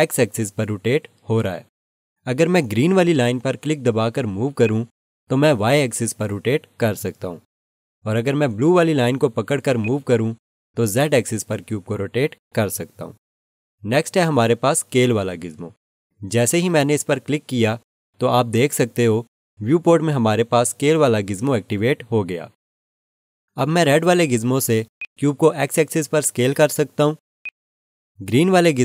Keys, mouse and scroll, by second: 14.3 ctrl+z, 17.6 click, 24.9 click, 27.4 right click.